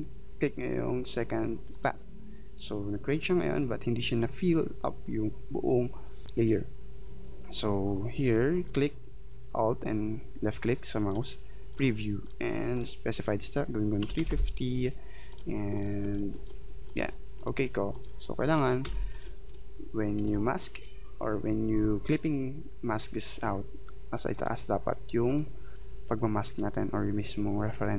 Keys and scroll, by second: 14.0 3, 14.2 5, 14.3 0, 18.8 v, 20.2 space.